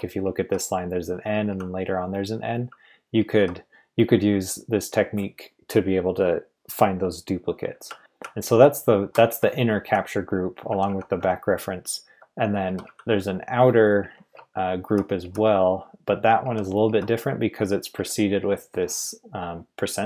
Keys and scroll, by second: 0.0-1.8 typing, 3.2 typing, 7.6-10.7 typing, 14.3-14.7 typing, 16.4-16.8 typing, 17.9-18.4 typing.